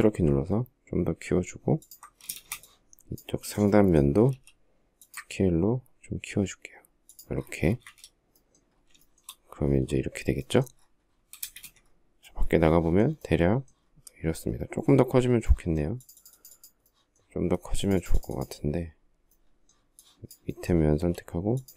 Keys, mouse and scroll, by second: 1.6 ctrl+click, 2.1 space, 4.1 s, 6.9 ctrl+click, 7.5 space, 7.6 Escape, 8.8 shift+middle click, 11.1 space, 11.3 Escape, 20.7 s.